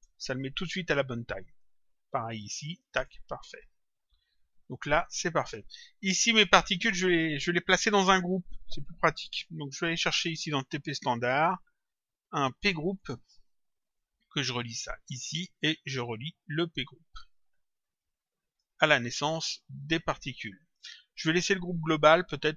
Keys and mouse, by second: 1.1 click, 2.5 ctrl+click, 4.0 click, 11.1 click, 12.9 click, 16.5 click, 19.7 click.